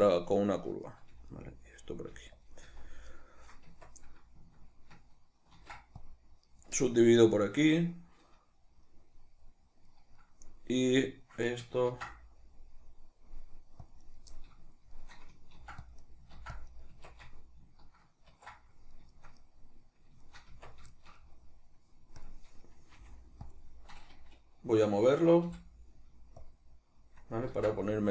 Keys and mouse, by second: 0.8 right click, 1.1 g, 1.9 click, 2.1 g, 2.4 click, 2.6 z, 3.1 right click, 3.7 Tab, 5.6 ctrl+r, 6.6 right click, 6.8-14.1 middle drag, 11.9 ctrl+r, 14.1 right click, 14.3-16.1 middle drag, 15.6 ctrl+r, 16.1 right click, 16.4 ctrl+r, 16.8 right click, 16.9 Tab, 18.3 ctrl+2, 19.1-22.2 shift+middle drag, 20.5 Tab, 22.2 click, 23.0 f, 23.5 click, 25.5 g, 26.5-28.1 drag, 27.5 ctrl+z.